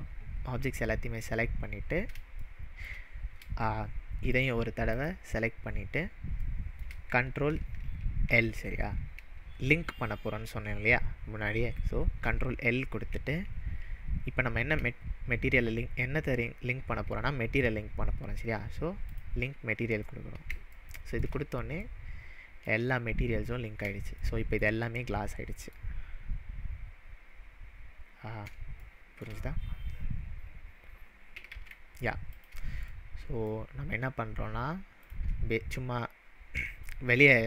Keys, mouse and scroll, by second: 2.5-3.0 shift+middle drag, 4.3 shift+click, 4.9 shift+click, 6.5-7.0 shift+middle drag, 12.2 ctrl+l, 19.0 ctrl+l, 19.2 click, 20.8-21.3 shift+middle drag, 26.0-27.8 scroll up 1, 28.8-29.4 shift+middle drag, 31.5 ctrl+z, 32.4 click, 33.0-33.5 middle drag, 35.1 click, 36.8 click.